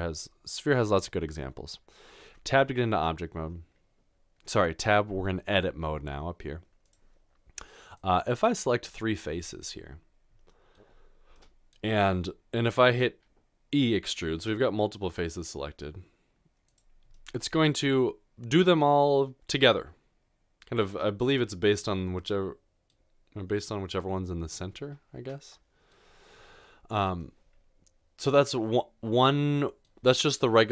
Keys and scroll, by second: 2.2 typing, 14.4 e.